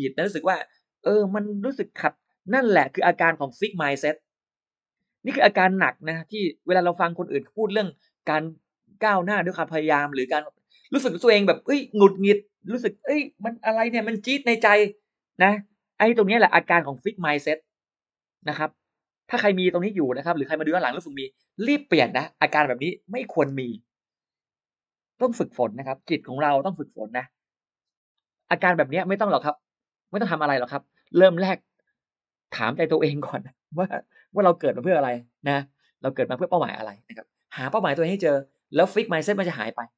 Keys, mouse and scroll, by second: 23.3 space.